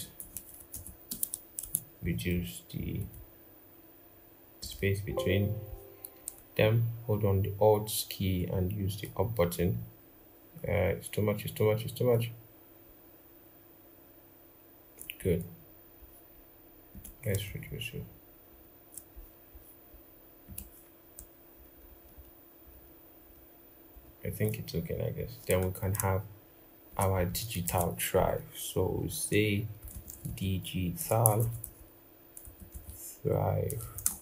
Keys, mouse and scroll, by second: 0.0-0.3 typing, 6.3 alt+Up, 8.9 alt+Up, 9.2 alt+Up, 9.3 alt+Up, 10.4 alt+Down, 10.5 alt+Down, 17.2 shift+Down, 17.4 shift+Down, 18.2 shift+Up, 21.3 alt+Up, 21.5 alt+Up, 21.7 alt+Up, 21.9 alt+Up, 22.5 alt+Up, 23.0 alt+Up, 23.7 alt+Down, 25.6 alt+click, 27.1 double click, 27.4 ctrl+a, 29.7-30.0 typing, 31.0 typing, 32.2-34.1 typing.